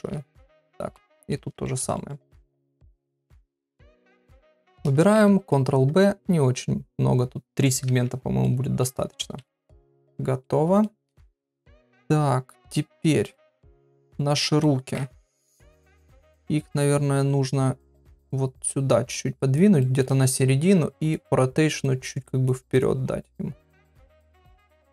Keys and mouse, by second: 0.1 Tab, 1.0 shift+middle click, 1.6 shift+middle click, 1.9 middle click, 2.5 Tab, 2.8 shift+middle click, 5.4 ctrl+b, 7.9 Tab, 8.4 middle click, 9.4 KP_Divide, 10.4 middle click, 11.3-12.8 middle drag, 13.3 shift+middle click, 14.1 middle click, 15.3 KP_7, 16.7 KP_3, 18.2-19.5 drag, 19.8 shift+middle click, 20.4 r, 21.9 click, 22.7 click, 23.7 click, 23.9 right click.